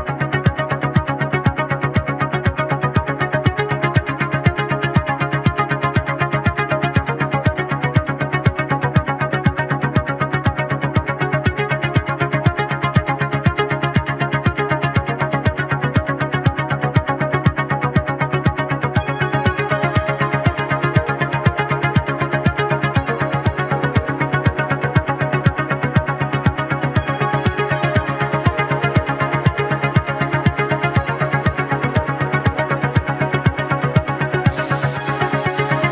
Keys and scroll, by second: 16.4 space, 22.0 space, 23.7 space, 26.1 space, 33.5 space, 34.2 space.